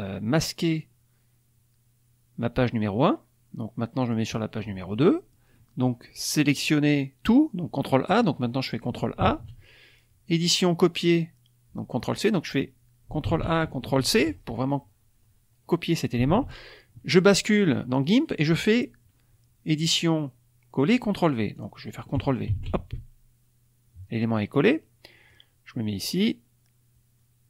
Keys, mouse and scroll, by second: 0.6 click, 3.9 click, 6.5 click, 8.0 click, 9.1 ctrl+a, 10.2 click, 12.2 click, 13.2 ctrl+a, 13.9 ctrl+c, 16.4 alt+Tab, 19.7 click, 21.5 click, 22.4 ctrl+v, 25.2-27.4 drag.